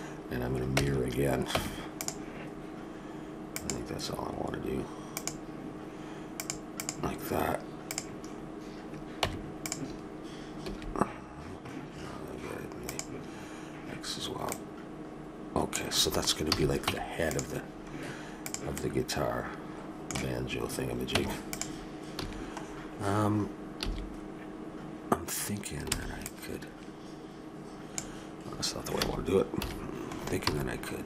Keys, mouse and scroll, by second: 0.8 Tab, 1.6 Tab, 3.5-9.4 drag, 9.2 Tab, 10.6 a, 12.8-16.4 drag, 16.9 Tab, 16.9 a, 17.7 middle click, 18.4 click, 18.8-20.3 middle drag, 21.1 Tab, 22.1 a, 23.8 a, 25.9 b, 29.0 a, 29.6 KP_7, 30.5 b.